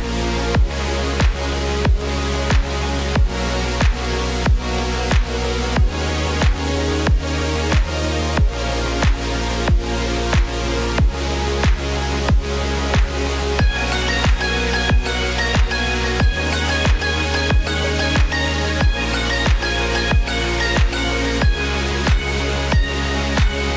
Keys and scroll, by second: 5.7 ctrl+0, 14.8 ctrl+=.